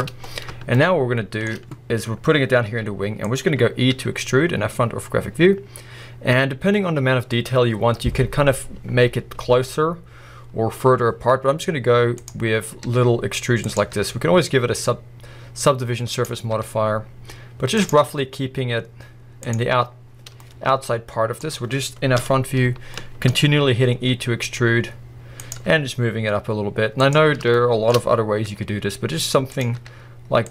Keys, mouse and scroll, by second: 0.5-1.5 shift+middle drag, 2.6 g, 3.3 click, 3.9 e, 12.3 click, 12.4 scroll down 1, 12.8 e, 13.7 click, 13.9 e, 16.2 click, 16.5 e, 17.9 click, 18.0 e, 19.6 click, 19.8-20.4 scroll down 1, 19.9 middle click, 21.4 scroll up 1, 22.2 KP_1, 23.0 shift+middle click, 23.4 scroll up 1, 23.9 scroll down 2, 24.1 e, 25.5 click, 25.6 e, 27.1 click, 27.5 shift+middle click, 27.9-28.4 scroll up 1, 28.4 e, 29.6 click, 29.8 e.